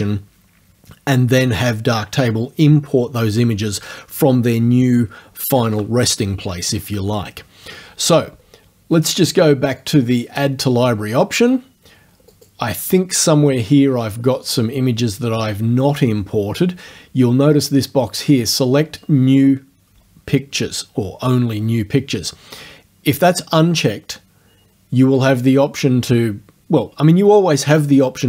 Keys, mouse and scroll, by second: 9.9 click, 10.3 click, 12.4 click.